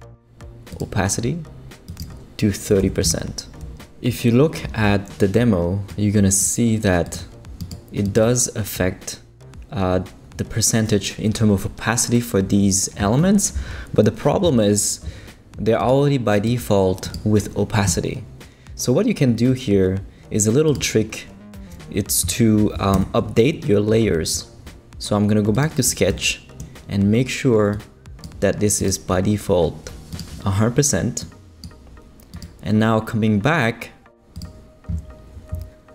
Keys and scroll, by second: 2.5-3.3 typing, 22.9 super+=.